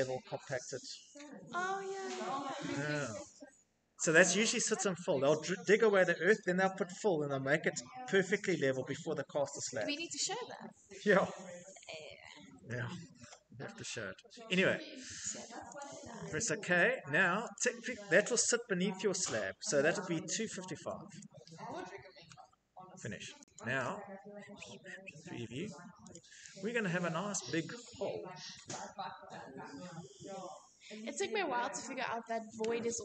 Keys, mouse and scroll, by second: 15.7 click, 17.4 click, 19.9-20.9 typing, 24.7 Escape, 27.2-27.7 middle click, 27.2 middle click, 31.7 scroll, 32.1-33.0 middle click, 32.4-32.9 scroll.